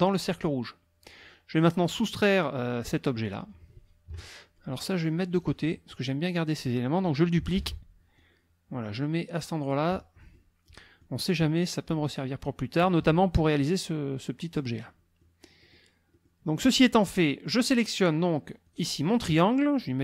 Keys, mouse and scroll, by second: 4.1 KP_Subtract, 4.8 click, 5.4 click, 7.6 ctrl+d, 8.2-9.9 ctrl+drag, 10.3 click, 11.2 middle click, 11.7-13.0 drag, 14.9 click, 15.6 click, 16.1 click, 17.1 click, 18.7 click.